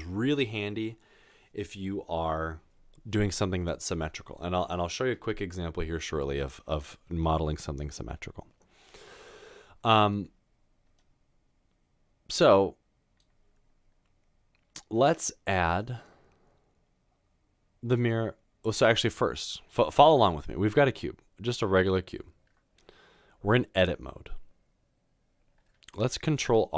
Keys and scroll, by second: 26.4 ctrl+r.